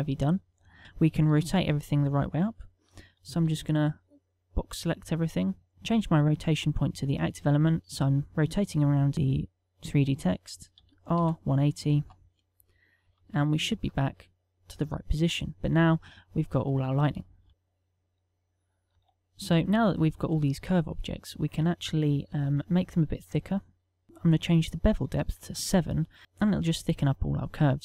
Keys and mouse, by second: 0.5 z, 0.8 ctrl+middle click, 1.4 KP_1, 2.8 shift+middle click, 4.3 z, 4.7 b, 7.3 click, 12.2 r, 14.5 shift+middle click, 15.1 KP_0, 17.5 ctrl+middle click, 17.8 click, 20.3 z, 23.2 middle click, 24.0 click, 26.2 middle click.